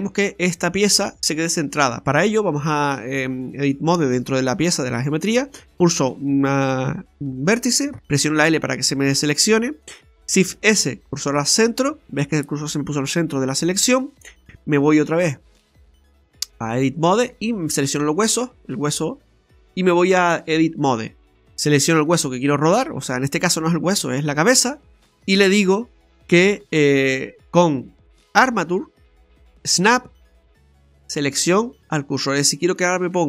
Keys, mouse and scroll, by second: 0.0 right click, 2.7 click, 4.8-5.5 scroll up 2, 5.5 right click, 10.5 shift+s, 15.7 click, 17.8 right click, 19.6 click, 22.0 right click, 23.4 right click, 24.8 scroll down 1, 25.0 middle click, 28.5 click.